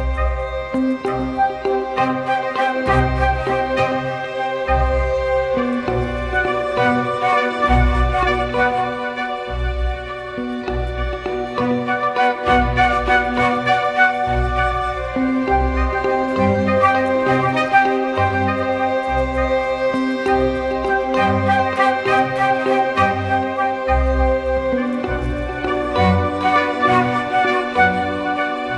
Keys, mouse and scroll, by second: 0.6 ctrl+click, 8.0 ctrl+click, 12.1 ctrl+click, 13.5 Return, 13.5 ctrl+click, 14.0 ctrl+t, 15.3 ctrl+click, 17.6 Return, 17.6 ctrl+click, 19.8 Right, 20.0 Right, 20.2 Right, 20.4 Right, 21.0 Right, 21.2 Left.